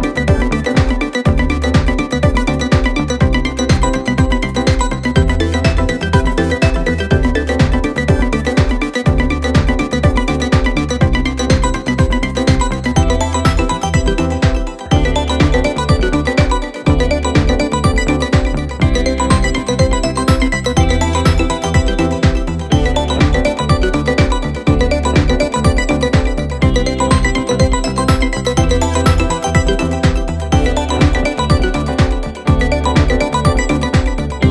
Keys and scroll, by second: 0.8 ctrl+d, 0.9 Escape, 1.8 Escape, 2.6 ], 3.9 4, 6.6 3, 7.7 ctrl+F1, 11.2 ctrl+z, 13.9 ctrl+F1, 18.8 ], 19.3 ], 21.0 4, 22.7 1, 23.9 ctrl+F1, 26.1 4, 29.7 4, 33.7 ctrl+d, 33.9 Escape.